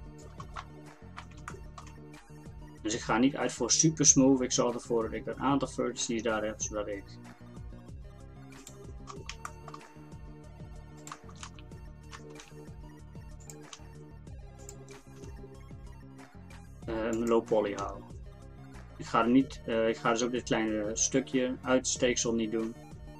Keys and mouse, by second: 2.8 click, 5.8 e, 10.2 e, 11.5 ctrl+z, 12.1 ctrl+z, 12.4 g, 13.8 g, 15.2 e, 17.8 e.